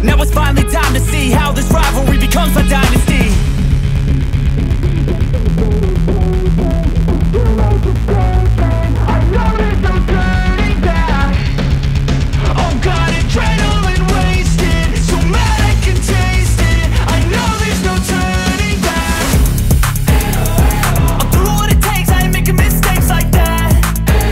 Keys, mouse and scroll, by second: 1.3 space, 1.8-2.3 scroll down 1, 2.6-5.1 drag, 7.4 right click, 9.9 ctrl+z, 12.6 click, 13.6 ctrl+right click, 15.8-19.3 drag, 19.3-23.5 drag, 23.5 right click.